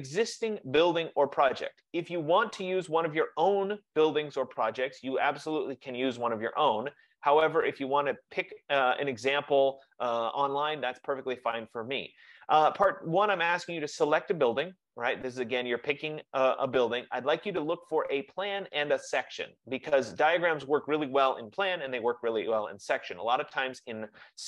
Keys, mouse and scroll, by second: 1.9-7.0 drag.